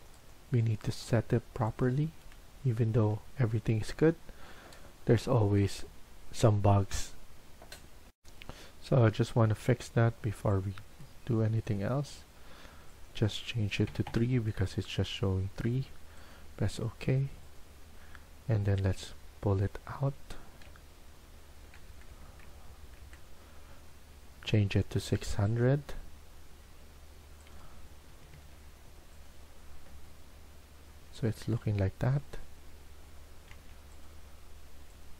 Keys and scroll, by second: 13.8 typing, 14.0 Return, 20.6-21.6 Down, 21.8 Down, 22.0 Down, 22.2 Down, 22.4 Down, 22.6 Down, 22.7 Down, 22.9 Down, 28.0 Escape, 28.2 Escape, 33.4 Escape.